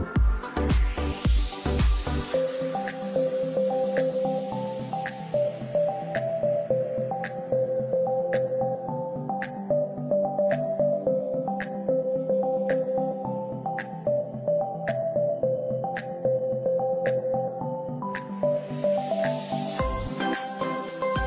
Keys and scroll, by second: 1.3 space, 1.5 F3, 5.4 F2, 8.9 9, 9.8 1, 10.6 5, 10.9 Return, 11.4 F3, 11.9 space, 15.3 Escape, 17.2 ctrl+g, 18.2 t, 18.5 r, 18.9 Escape.